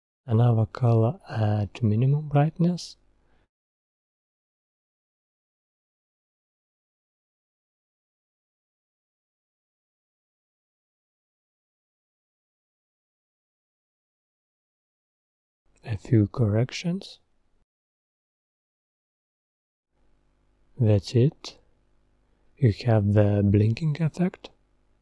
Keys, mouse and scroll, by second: 11.7 click, 17.3 click, 21.0-24.0 drag.